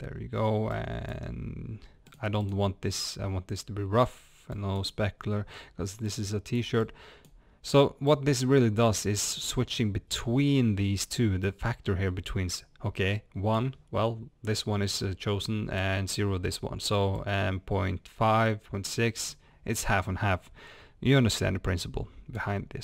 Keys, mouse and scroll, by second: 3.1-6.1 drag, 6.9-22.8 drag.